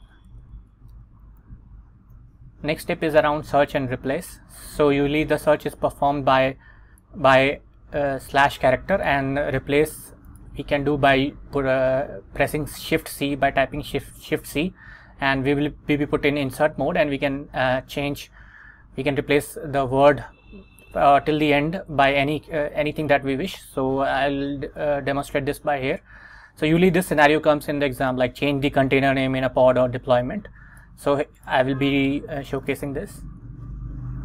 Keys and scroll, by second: 0.6 super+Tab, 1.0 Return, 2.1 Right, 33.6 super+Tab.